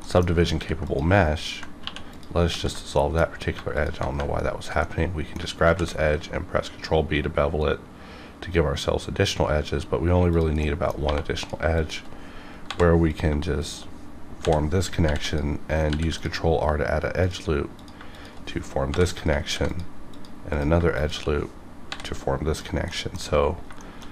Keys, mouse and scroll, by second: 0.0 middle click, 0.5 ctrl+r, 0.8 click, 1.1 right click, 1.8 2, 2.1 click, 2.5 ctrl+x, 2.9 middle click, 3.7 alt+click, 4.8 middle click, 5.7 ctrl+b, 7.7-9.5 scroll up 1, 10.3 click, 10.6 middle click, 11.0 1, 11.4 click, 11.7 shift+click, 12.6 j, 13.3 click, 13.6 shift+click, 14.4 j, 15.2 ctrl+click, 15.9 ctrl+r, 16.1 click, 18.1 shift+click, 19.4 ctrl+r, 19.7 click, 20.6 click, 20.9 shift+click, 20.9 shift+click, 21.9 j, 22.5 click, 22.9 middle click, 22.9 click, 23.0 middle click, 23.1-23.7 scroll down 2, 23.8 shift+middle click.